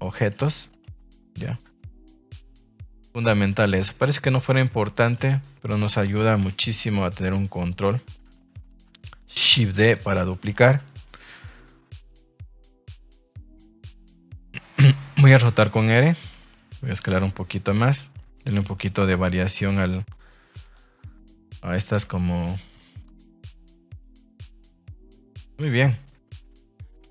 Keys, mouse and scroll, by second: 0.1 click, 0.3 g, 0.9-1.4 middle drag, 1.4 shift+middle drag, 1.6 scroll down 1, 1.7-2.0 middle drag, 2.1 middle click, 2.3 scroll down 1, 2.5 r, 2.9 click, 3.0 g, 3.6 click, 3.8 r, 4.2 click, 4.4-4.9 middle drag, 5.2 shift+middle drag, 6.3 KP_1, 7.1 middle click, 7.3-7.7 middle drag, 8.0 shift+middle drag, 8.3 middle click, 8.6 middle drag, 9.3 shift+d, 10.0 click, 10.3 middle click, 10.7 middle click, 11.3 middle click, 11.6 r, 12.5 g, 13.7 middle click, 15.3 r, 16.2 click, 16.5 s, 17.0 click, 17.1 g, 17.5 click, 17.8-18.3 middle drag, 19.7 click, 20.1-20.4 middle drag, 20.4 a, 20.9-21.2 middle drag, 21.9 KP_0, 22.7 middle drag, 23.3 shift+middle click, 23.9 middle click, 24.2 shift+middle drag, 24.8 shift+middle drag, 25.6 middle click.